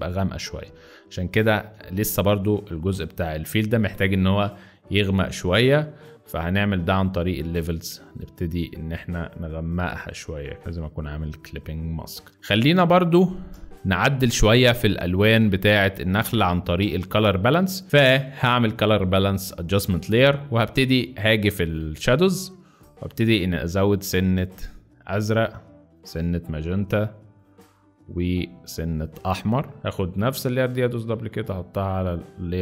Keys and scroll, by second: 1.5 v, 11.4 alt+z, 12.3 alt+space, 12.4 z, 13.5 space, 14.6 z, 15.3 space.